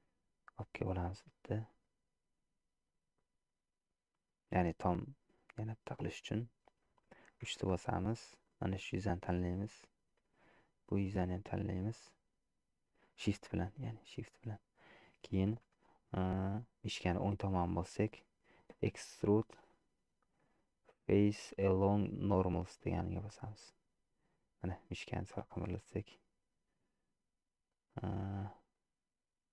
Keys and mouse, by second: 5.0-6.9 middle drag, 7.7 3, 8.5 click, 9.3-10.5 middle drag, 11.6-12.7 middle drag, 13.5-14.9 middle drag, 17.4-29.5 right drag.